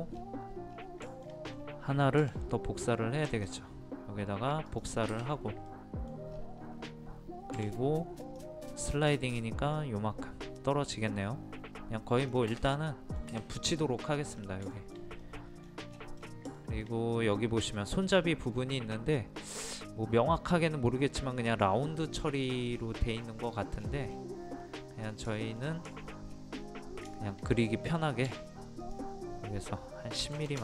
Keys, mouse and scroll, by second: 0.1-0.7 scroll down 2, 1.1 shift+middle click, 1.5-2.2 scroll up 1, 2.2 m, 3.3 ctrl+click, 5.7 middle click, 7.6 typing, 8.2 click, 12.7-13.7 middle drag, 14.4 scroll down 1, 14.7 shift+middle click, 15.6 scroll down 1, 16.6 shift+middle click, 17.1-17.5 scroll up 1, 22.7 scroll down 1, 24.6 middle click, 25.4 shift+middle click, 26.3-26.6 scroll up 1, 27.1 shift+middle click, 27.5 scroll up 1, 28.3 typing, 28.8 click, 30.2 KP_1.